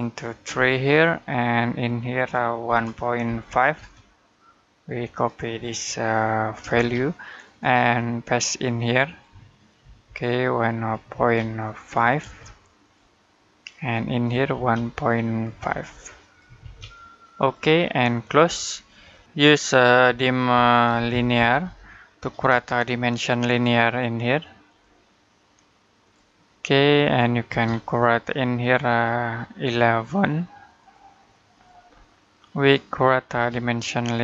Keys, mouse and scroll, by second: 1.7 click, 2.5 typing, 3.6 typing, 4.7 click, 6.5 ctrl+c, 9.6 ctrl+v, 10.4 click, 11.0 ctrl+v, 11.4 click, 12.1 v, 12.6 click, 14.3 ctrl+v, 14.9 click, 15.5 ctrl+v, 15.9 click, 16.4 ctrl+v, 17.2 click, 18.7 middle click, 19.9 typing, 20.9-22.3 typing, 24.5 click, 27.3 space, 27.5-28.4 scroll up 1, 28.4 click, 31.7-32.0 scroll down 1, 32.0 middle click, 33.1 space, 33.3-34.2 scroll up 1.